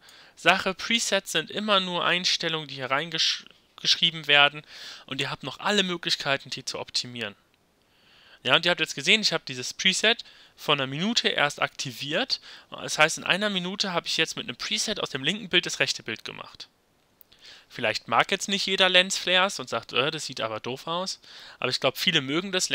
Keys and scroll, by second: 13.1 y.